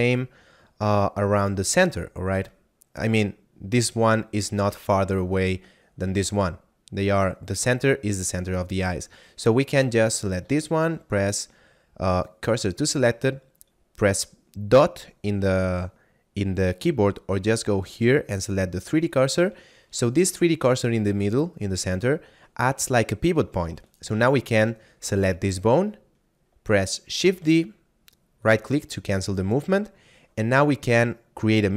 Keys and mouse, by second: 9.5 right click, 10.5 shift+s, 12.3 click, 17.5 click, 23.9 right click, 27.1 shift+d, 28.3 right click.